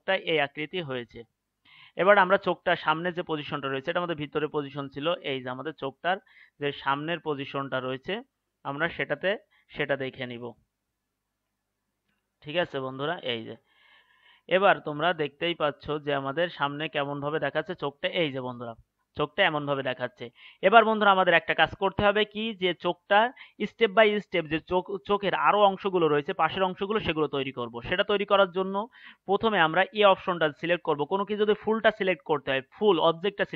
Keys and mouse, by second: 15.3-23.8 middle drag, 28.0-33.5 middle drag.